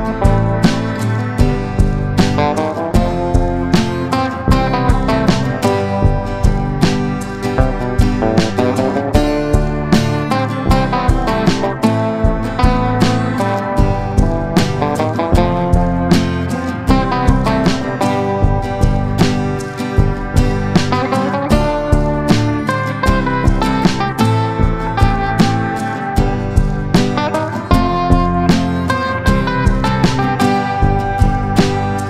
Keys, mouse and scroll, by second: 2.3 ctrl+g, 3.1 click, 3.9 Down, 4.2 Down, 6.0 ctrl+shift+g, 6.8 ctrl+shift+g, 8.2-27.6 drag, 29.8 F4, 30.6 click.